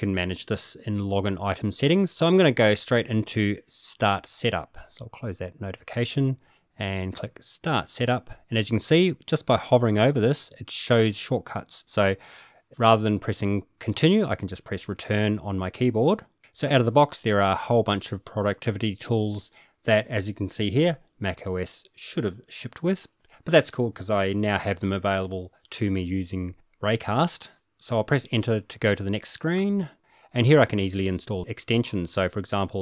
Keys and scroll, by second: 6.5 Return, 29.7 Return.